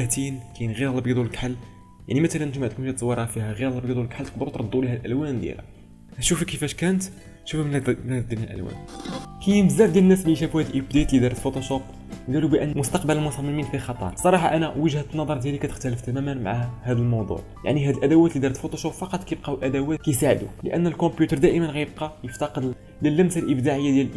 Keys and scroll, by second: 0.6 ctrl+space, 1.3 ctrl+space, 6.0 ctrl+z.